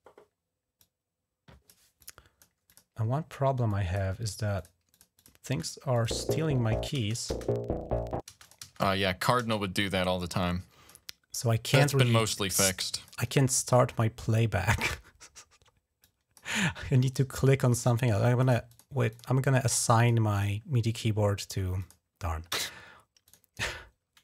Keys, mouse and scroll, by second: 0.6 click, 1.8 click, 2.5 click, 3.5 click, 4.4 click, 4.7 click, 5.0 click, 5.3-8.1 typing, 5.7 click, 8.2 click, 10.1 click, 12.2 click, 15.8 click, 17.5 click, 18.2 click, 18.5 click, 18.9 click, 19.8 click, 20.1 click, 21.6 click, 23.0 click.